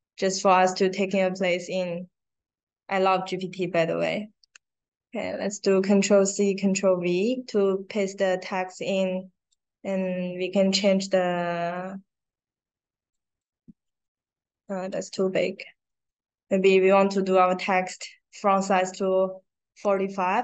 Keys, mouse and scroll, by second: 9.4 click, 13.1 click, 14.8 click, 19.8 click.